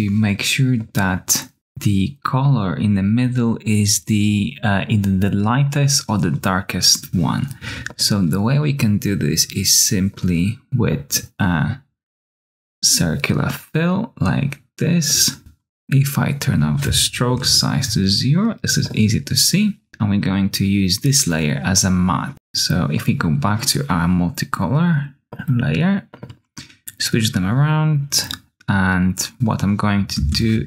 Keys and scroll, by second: 17.2 0, 17.3 Return, 30.1 ctrl+space.